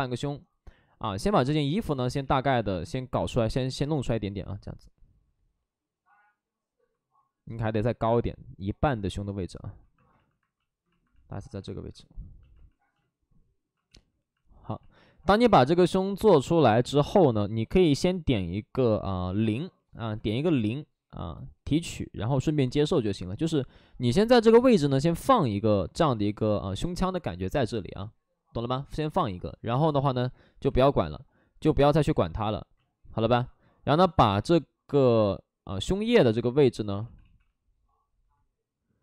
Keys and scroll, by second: 2.1 ctrl+z, 2.5 ctrl+z, 2.7 ctrl+z, 3.0 ctrl+z, 10.2 alt+s, 13.8 ctrl+z, 19.8 0, 20.1 Return, 20.2 Return, 31.0 alt+s, 35.6 alt+s, 35.9 alt+s, 36.9 ctrl+z, 37.1 ctrl+z.